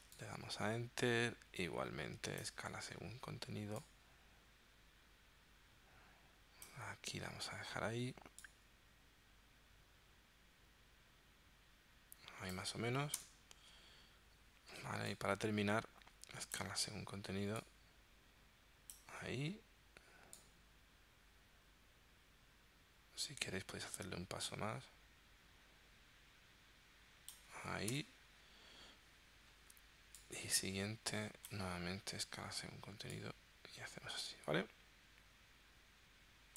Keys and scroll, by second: 13.2 Return, 28.0 Return.